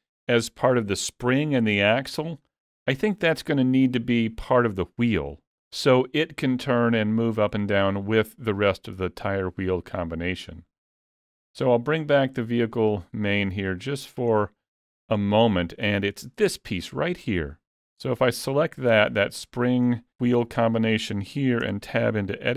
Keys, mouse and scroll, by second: 2.5-2.8 scroll down 2, 2.8 middle click, 9.7 middle click, 12.1 click, 12.8 middle click, 13.8 middle click, 14.4 scroll up 1, 14.7 shift+middle click, 15.3 middle click, 15.7 scroll up 1, 16.0 shift+middle click, 18.5 click, 21.7 Tab.